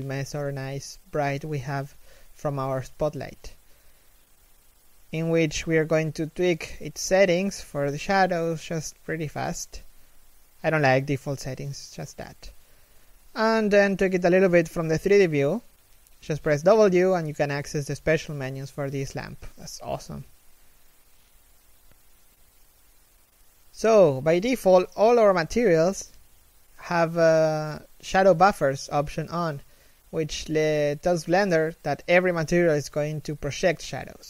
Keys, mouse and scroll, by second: 1.5 right click, 11.2 w, 14.3 scroll down 1, 14.3 w, 15.8 middle click, 16.2 1, 16.5 scroll up 1, 16.7 a, 16.8-17.5 scroll down 1, 17.5 shift+middle click, 18.3 1, 20.6-22.3 scroll up 1, 22.5 scroll down 1, 23.3 shift+middle click.